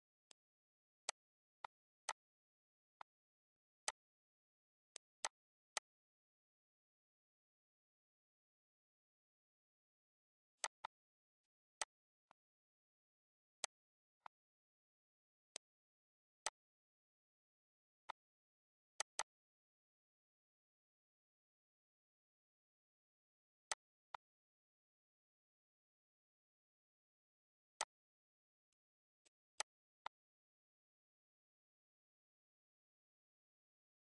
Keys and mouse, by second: 0.2 click, 1.0 click, 1.5 click, 1.9 click, 2.3 ctrl+s, 2.6 click, 3.0 click, 4.2 click, 4.7 click, 5.4 click, 8.7 click, 9.4 click, 10.2 click, 11.4 click, 12.0 click, 12.4 ctrl+d, 12.8 click, 13.1 click, 13.9 click, 15.6 click, 16.4 click, 18.7 ctrl+s, 21.3 click, 21.7 shift+click, 23.4 click, 24.2 click, 25.4 click, 26.2 click, 26.7 click, 27.5 click, 27.8 ctrl+s.